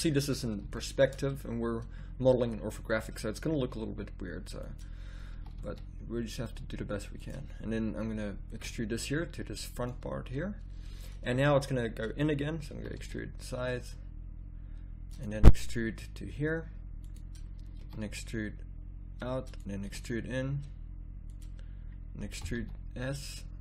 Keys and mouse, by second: 1.0 middle click, 2.3 e, 5.3 e, 8.7 e, 12.7 e, 13.3 middle click, 15.5 e, 17.8 e, 19.8 e, 22.3 e.